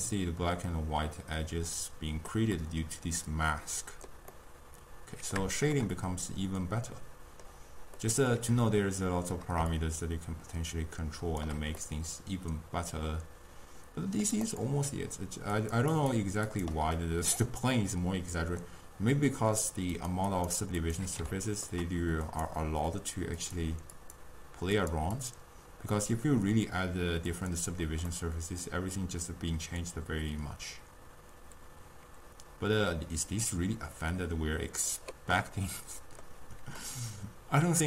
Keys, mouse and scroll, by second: 8.9-9.8 scroll down 1, 9.8-11.8 shift+drag, 11.8 scroll up 1, 11.9-14.4 middle drag, 14.4 scroll down 1, 14.6 click, 15.6 click, 16.0 click, 16.6 click, 17.1-20.0 middle drag, 20.0 click, 20.4 click, 20.9 click, 21.4 scroll up 1, 21.4-22.4 ctrl+middle drag, 22.4 click, 23.5-26.0 drag, 26.0-27.4 middle drag, 27.4 click, 28.1 scroll down 1, 28.2-31.2 middle drag, 35.6-37.8 middle drag.